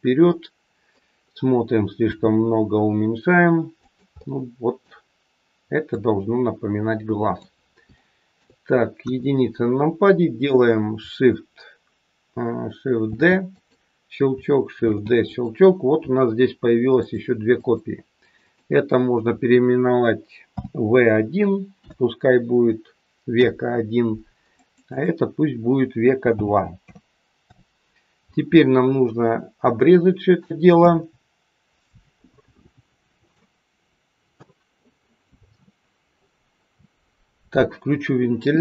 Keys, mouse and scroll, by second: 0.1 middle click, 2.0 s, 4.1 middle click, 5.9 click, 7.9 shift+middle click, 9.0 KP_1, 13.0 shift+d, 14.7 shift+d, 16.9 click, 17.5 click, 24.5 click, 24.7 click, 29.1-29.6 scroll up 4, 29.7 shift+middle click.